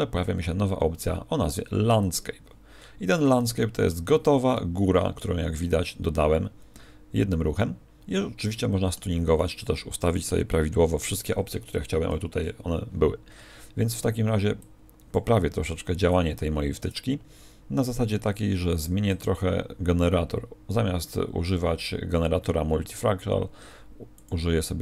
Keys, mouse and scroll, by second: 12.0 t, 14.6 click, 16.0 click, 19.0 click.